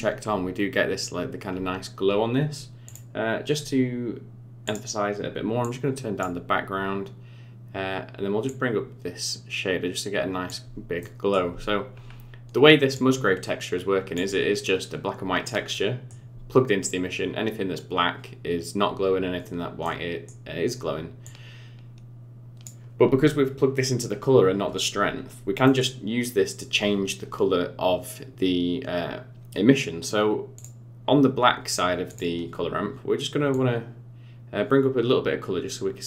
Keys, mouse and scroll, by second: 0.2 scroll up 5, 1.5 scroll down 4, 2.8 click, 4.6 click, 5.6 click, 8.4 click, 11.0 middle click, 12.0 scroll down 3, 12.9 click, 15.7 middle click, 19.8 middle click, 21.2 click, 25.2-25.6 scroll up 4, 25.6 middle click, 30.5 click, 32.0 click.